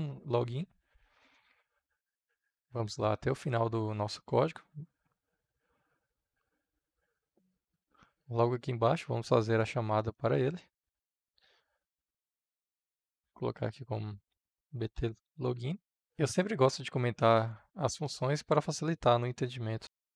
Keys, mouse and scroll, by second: 0.3 ctrl+c, 2.4-4.4 middle drag, 4.4-9.8 drag, 9.8 Return, 11.3 shift+3, 12.5-16.0 typing, 16.0 ctrl+z, 17.4-20.1 drag.